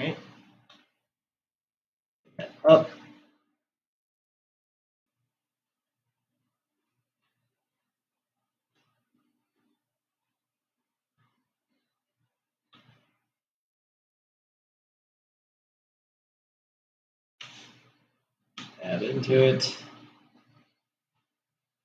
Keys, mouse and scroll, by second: 1.5 g, 6.5-7.4 scroll up 2, 7.8-13.4 shift+middle drag, 13.4 g, 19.5 Tab.